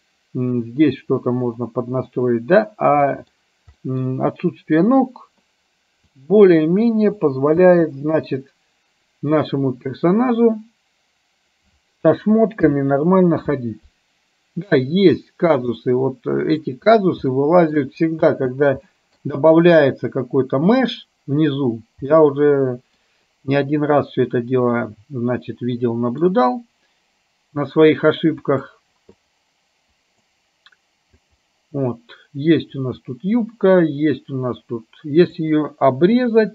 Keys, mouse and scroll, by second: 3.9-4.7 middle drag, 6.2-7.1 drag, 7.7 space, 13.7 alt+h, 16.1-18.3 middle drag, 18.3 space, 24.8-28.6 middle drag, 28.6-30.3 drag, 31.4 click, 33.2-35.6 drag, 36.2 KP_2.